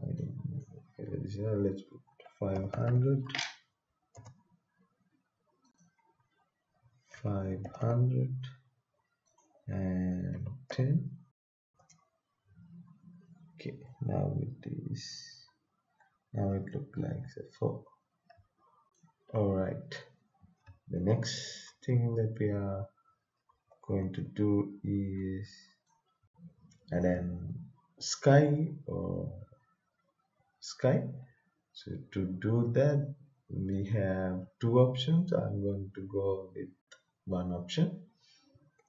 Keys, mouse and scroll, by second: 0.1-2.1 drag, 1.8-4.1 typing, 5.6 click, 7.1-7.7 typing, 9.2 click, 10.3-10.7 typing, 11.7 Return, 13.8-15.1 right drag, 15.1-17.2 typing, 18.3 s, 19.9 right click, 20.4-25.3 typing, 27.0 click, 33.7 click.